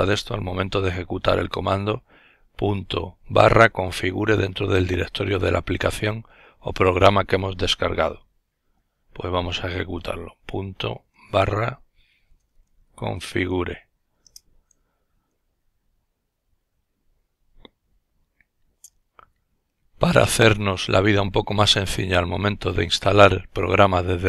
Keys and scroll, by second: 9.0-13.0 typing.